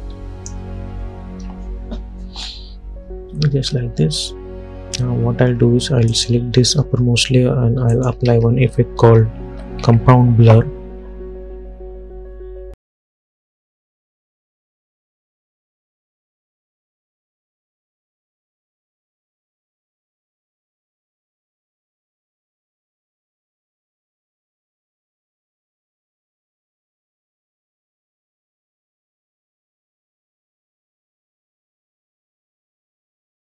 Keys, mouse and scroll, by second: 8.4 ctrl+a, 8.9-10.5 typing, 14.5-15.2 typing, 16.3 click, 21.9-27.9 drag, 27.9 space, 29.8 space, 30.1 click, 30.6 space, 32.6-33.4 drag.